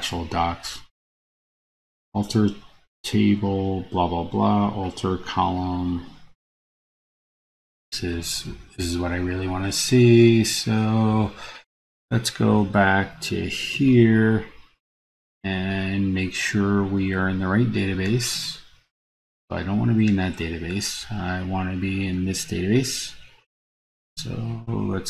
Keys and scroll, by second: 8.1 super+c, 13.9 super+v.